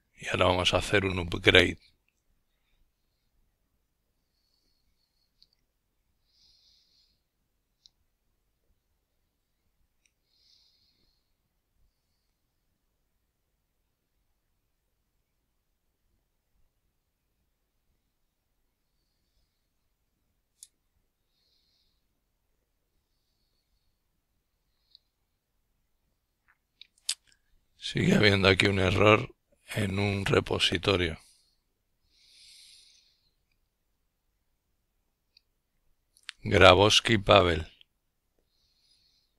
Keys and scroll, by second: 29.6-31.9 typing.